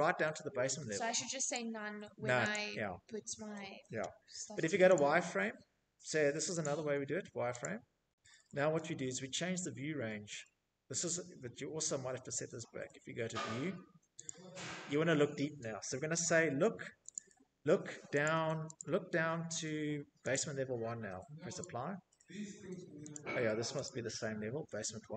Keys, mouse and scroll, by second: 0.0 click, 1.1 click, 3.5 click, 5.1 click, 6.1 click, 6.8 middle click, 7.0 middle click, 7.7 middle click, 7.8 middle click, 8.4 middle click, 9.3 middle click, 10.1 middle click, 11.1 middle click, 11.1 middle click, 12.8 click, 15.6 click, 16.7 click, 17.3 click, 18.8 click, 20.1 click, 21.6 click, 22.4 click, 23.7 click, 24.5 click.